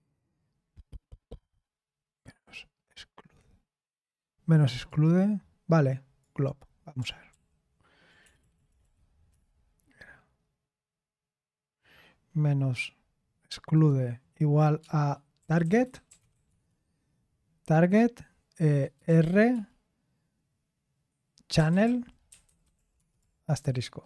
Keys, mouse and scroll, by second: 2.2-4.9 scroll down 1, 4.9-6.2 scroll down 1, 6.2-7.3 scroll down 1, 7.3 ctrl+p, 8.2 BackSpace, 8.4 BackSpace, 8.6 BackSpace, 8.7 BackSpace, 15.9-16.8 typing, 19.1-19.5 typing, 21.3-24.0 typing.